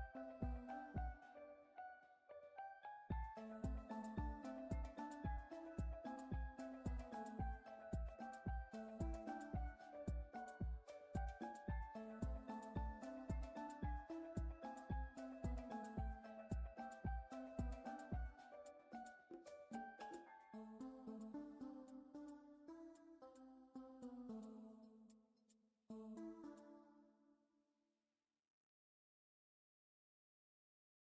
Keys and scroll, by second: 3.4 z, 14.6 z, 16.4 z, 18.7 z.